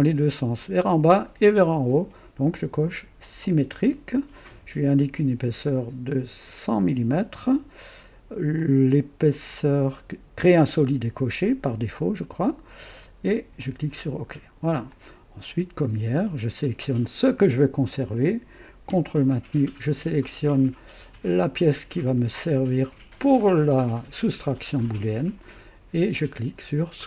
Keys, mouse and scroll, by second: 3.2 click, 6.3 click, 7.4 KP_0, 8.5-9.6 drag, 12.3 click, 13.6 click, 14.9-16.4 drag, 17.0 click, 23.2 ctrl+click, 26.9 click.